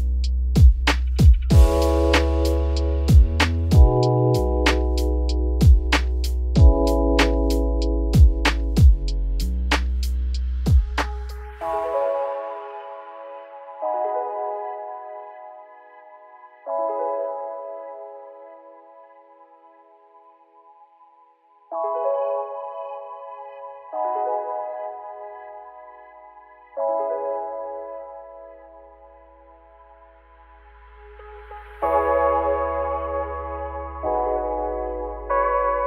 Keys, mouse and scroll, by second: 1.2 shift+d, 2.7 x, 3.6 click, 4.0 click, 4.2 Tab, 4.7 a, 5.1-5.7 scroll down 3, 5.7 shift+d, 6.6 r, 10.6-11.0 scroll down 3, 11.0 ctrl+z, 13.0 ctrl+z, 13.7 z, 14.2 click, 14.9-15.3 scroll up 3, 15.3 s, 17.4 click, 18.1 s, 20.3-21.2 scroll down 7, 20.5 z, 21.2 Tab, 21.4-21.8 middle drag, 21.8-22.3 scroll up 7, 22.3 click, 22.5 scroll down 2, 22.8-24.2 middle drag, 24.2 click, 24.5 Tab, 24.6 middle click, 24.8-25.2 scroll up 4, 25.2 click, 25.6 alt+click, 26.1 alt+shift+click, 27.1 ctrl+z, 27.5 alt+shift+click, 28.0 alt+shift+click, 28.6 middle click, 29.1 2, 29.3 click, 30.0 alt+shift+click, 30.5 alt+shift+click, 31.3 alt+shift+click, 31.7 alt+shift+click, 32.3 alt+shift+click, 32.9 middle click, 33.4 ctrl+b.